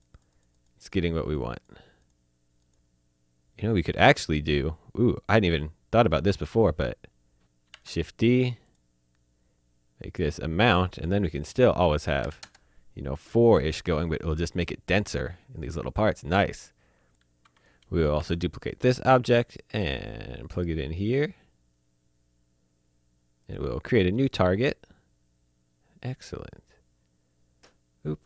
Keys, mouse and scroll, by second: 3.9 click, 7.5 shift+Num_Lock, 7.6 d, 7.9 click, 8.6 click, 12.2 KP_4, 12.4 KP_Enter, 16.6 click, 18.1 shift+d, 18.7 click, 20.2 click, 23.4 click.